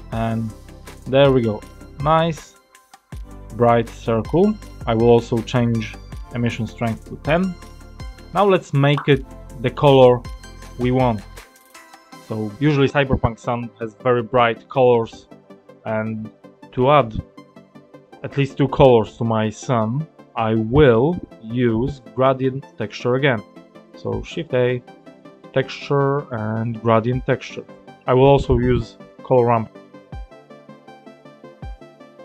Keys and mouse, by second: 0.4-1.4 middle drag, 1.7-2.4 drag, 2.4-3.0 middle drag, 6.2-7.8 drag, 12.0 middle click, 24.0 shift+a, 28.9 shift+a.